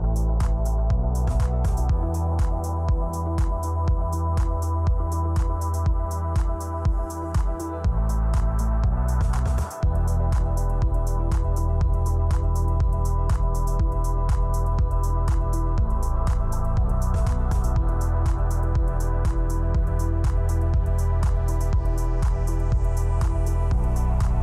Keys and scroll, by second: 3.8 space, 9.8 space, 10.1 space, 11.8-12.8 typing, 13.0 Return, 15.5 space, 17.0 space.